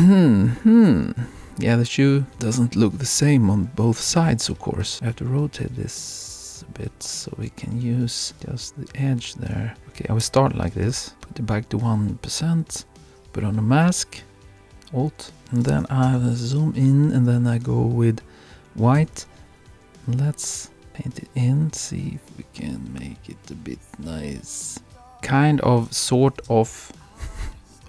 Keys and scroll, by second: 10.3 Return.